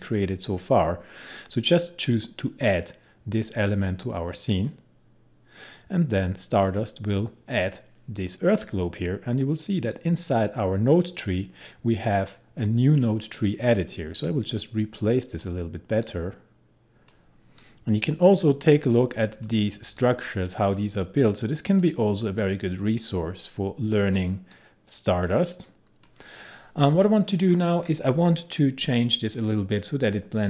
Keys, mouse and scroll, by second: 4.6 click, 10.0-28.5 drag.